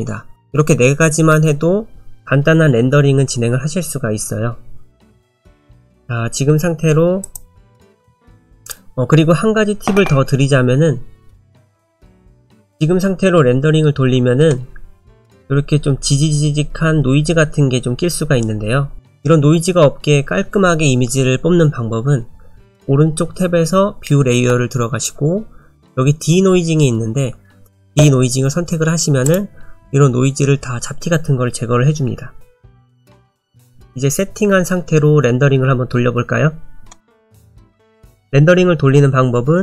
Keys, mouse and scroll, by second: 7.2 click, 8.6 click, 29.2 click.